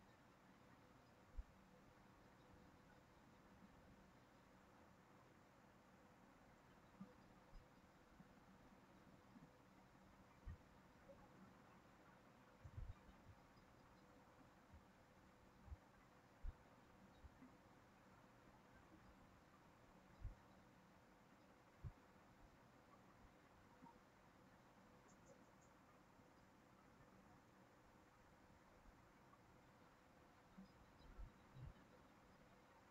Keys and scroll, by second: 11.2 ctrl+c, 11.4 ctrl+v, 14.0 ctrl+z.